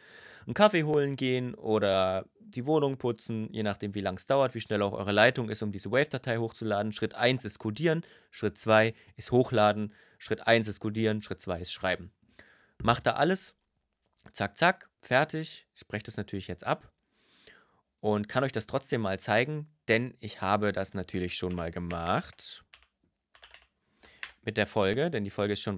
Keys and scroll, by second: 21.1 [, 21.6 BackSpace, 22.4 p, 23.1 i, 23.9 Return.